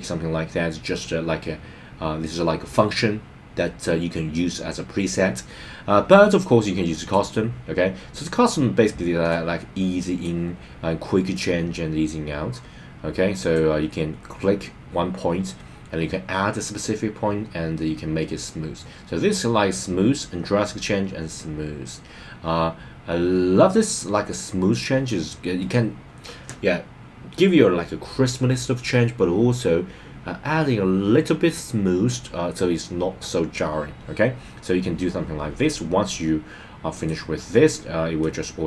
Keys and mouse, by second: 9.3-10.3 drag, 11.3-13.6 drag, 36.9 click, 38.2-38.6 drag.